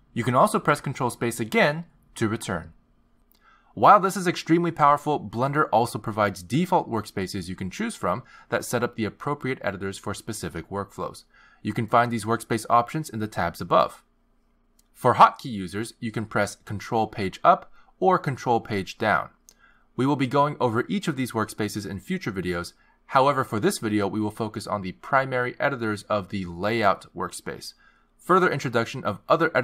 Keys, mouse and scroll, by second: 2.6 ctrl+space, 4.4 ctrl+space, 18.9 ctrl+Page_Down, 18.9 click, 20.4 ctrl+Page_Down, 20.4 ctrl+Page_Up.